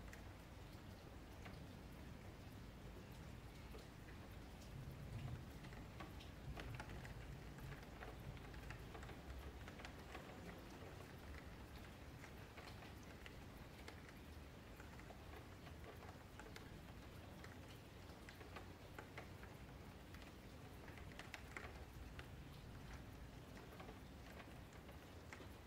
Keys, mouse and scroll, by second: 1.2 click, 1.5-1.9 scroll up 2, 1.9 shift+middle click, 2.6 shift+click, 2.9 shift+click, 3.6 shift+click, 4.1 shift+click, 5.7 g, 6.8 shift+click, 7.6 click, 8.4 alt+shift+a, 9.1-9.7 scroll up 3, 9.7 click, 10.5 click, 10.9 shift+click, 11.5 click, 11.8 shift+click, 12.0 alt+shift+a, 12.6 click, 13.6 scroll up 2, 13.8 shift+middle click, 14.0 scroll down 2, 14.7 KP_Decimal, 15.3 click, 15.9 click, 16.2 shift+click, 16.4 alt+shift+a, 16.5-17.4 scroll down 7, 17.4 click, 17.8 shift+click, 18.1 alt+shift+a, 18.2-19.3 scroll down 10, 18.6 shift+middle click, 19.3 click, 19.6 shift+click, 19.9 alt+shift+a, 20.1 shift+middle click, 20.9 click, 21.1 shift+click, 21.3 alt+shift+a, 21.5 shift+middle click, 22.0 click, 22.2 shift+click, 22.4 alt+shift+a, 22.9 shift+click, 23.2 alt+shift+a, 23.3-23.8 scroll down 6, 23.8 shift+middle click, 24.1 click, 24.4 scroll up 3, 24.7-25.6 shift+middle drag.